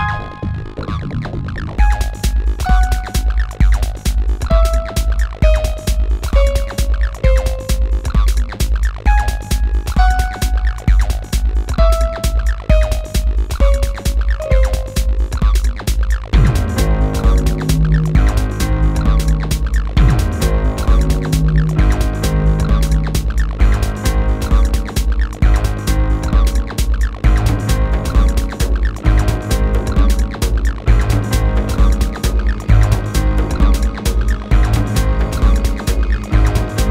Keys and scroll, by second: 7.0 r, 8.1 w.